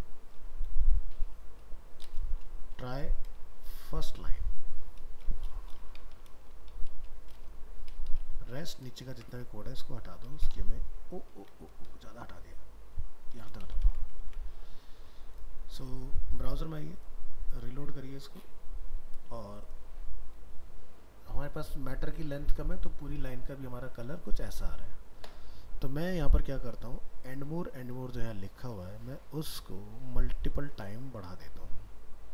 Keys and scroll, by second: 3.4 ctrl+shift+Left, 9.1 ctrl+shift+End, 11.4 ctrl+z.